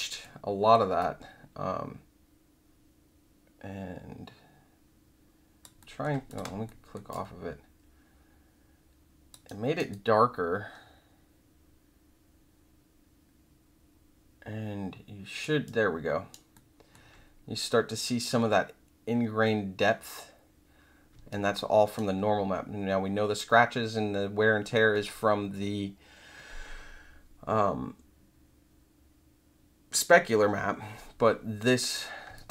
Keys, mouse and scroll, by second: 0.2 alt+middle click, 0.9-5.6 alt+drag, 5.8 alt+middle click, 6.2 click, 6.6 alt+middle click, 7.1-9.3 alt+drag, 9.4 alt+right click, 9.9-15.4 alt+drag, 15.6 alt+right click, 16.5 alt+middle click, 21.3 alt+right click, 32.3-32.5 alt+drag.